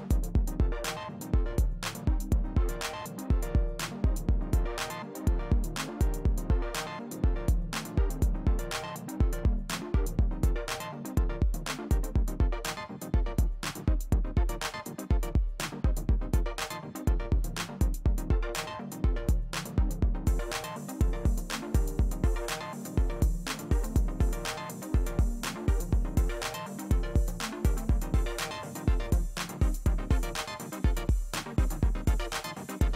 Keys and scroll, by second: 26.4 space, 31.0 space.